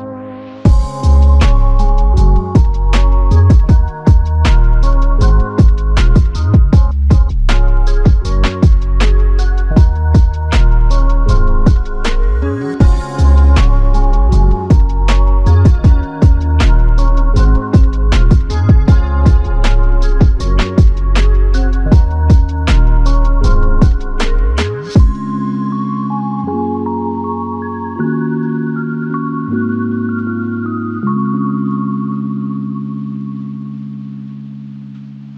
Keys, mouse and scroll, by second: 8.7 double click, 12.9 double click, 13.1 ctrl+click, 20.7-21.6 typing, 21.7 alt+click, 23.6 typing, 25.1 double click, 28.8 alt+click, 30.2 double click, 31.2 f, 32.1 alt+click, 34.1 ctrl+alt+click.